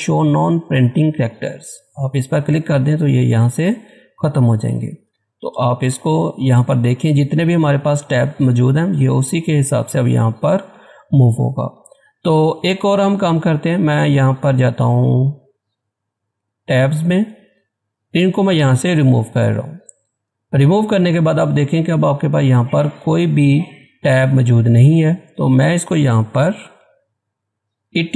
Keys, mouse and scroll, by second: 1.7 click, 3.8-5.0 scroll down 1, 5.0 Tab, 9.0-10.8 scroll down 1, 14.6 click, 19.0 click, 25.3 click.